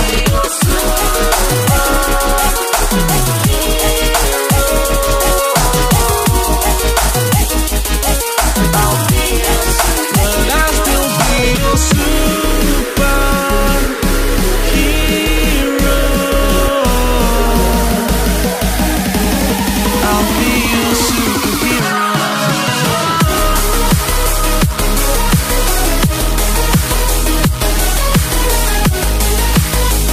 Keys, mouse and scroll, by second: 2.1 t, 2.7 Return, 2.9 0, 3.7 alt+scroll up 2, 4.7 click, 6.9 alt+scroll down 1, 7.5 click, 7.9 Delete, 8.2-9.3 typing, 8.3 click, 9.5 click, 10.4-10.9 alt+scroll up 4, 11.4 click, 12.9 Return, 13.3 click, 14.8 click, 17.7 right click, 18.1 click, 19.3 click, 22.1 right click, 22.5 click, 27.1 0, 28.1 scroll up 1, 28.8 scroll down 1, 29.4 click, 29.8 right click.